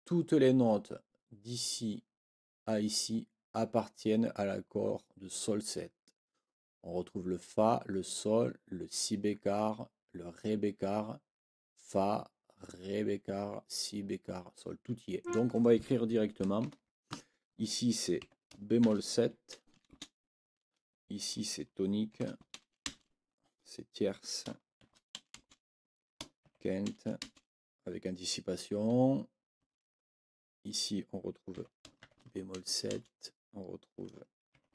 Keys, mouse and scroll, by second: 15.2 click, 16.6 ctrl+l, 18.2 b, 19.9 space, 22.1 shift+t, 22.8 space, 25.4 shift+space, 26.4 shift+9, 27.2 space, 29.6 space, 31.5 b, 32.9 space, 34.5 shift+9.